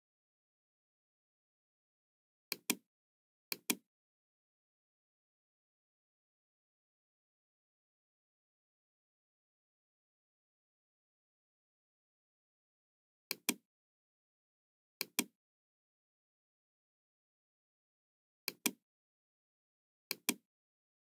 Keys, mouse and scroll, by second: 0.2 scroll down 2, 2.4 click, 3.4 click, 4.4-4.7 scroll down 2, 13.2 click, 14.3 scroll down 1, 15.0 click, 18.4 click, 20.0 click.